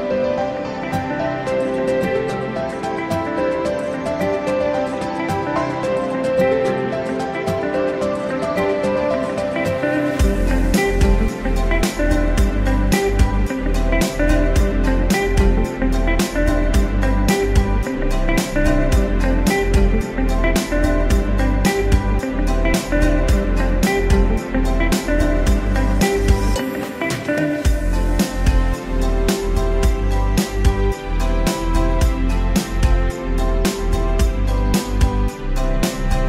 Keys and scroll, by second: 32.8 ctrl+shift+j.